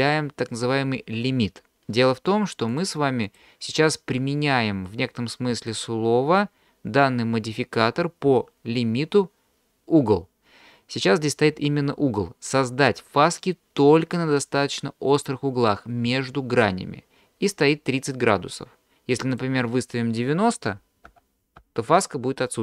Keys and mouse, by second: 2.8-3.4 drag, 19.3-22.6 drag.